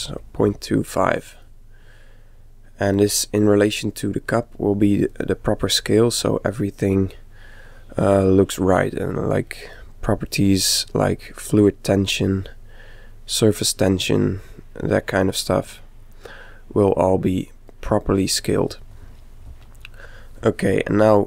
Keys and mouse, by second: 1.5-3.3 middle drag, 5.1-7.0 middle drag, 7.0 middle click, 9.0-12.0 middle drag, 12.2-14.1 middle drag, 14.1-16.0 middle drag.